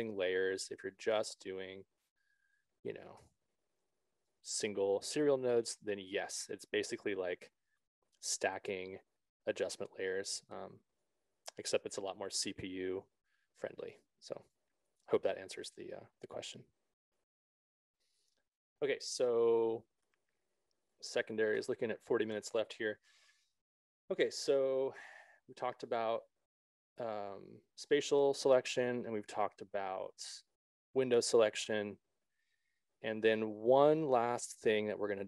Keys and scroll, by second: 3.0 BackSpace, 14.8 s.